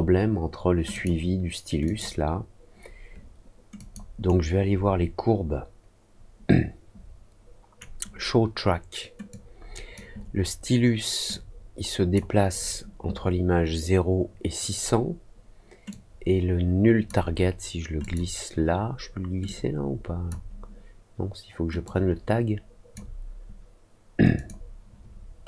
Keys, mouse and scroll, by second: 0.9 click, 1.8 click, 3.7 click, 4.2-7.7 right drag, 9.2 click, 11.2 click, 15.8-17.0 drag, 17.9 click, 19.4 click, 21.8-22.9 drag, 24.3 click, 25.2 middle click.